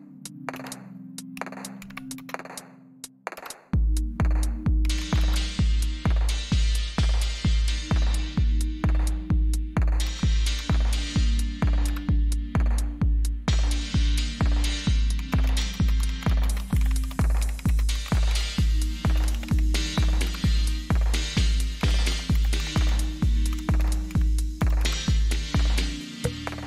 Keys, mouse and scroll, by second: 0.0-0.5 typing, 1.7-2.1 typing, 3.3 Return, 4.5-5.3 typing, 10.0 Up, 10.5 Up, 11.6 Left, 11.6 Delete, 11.8 Return, 12.9 typing, 14.9-20.4 typing, 20.2 Return, 21.5-25.0 typing.